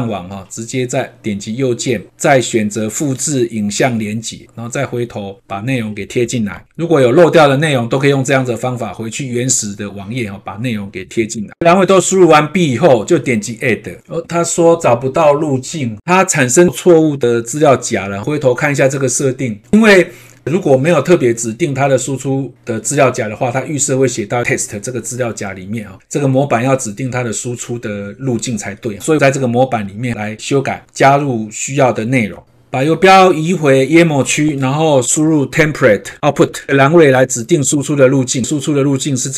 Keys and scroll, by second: 6.5 ctrl+v, 11.1 ctrl+`.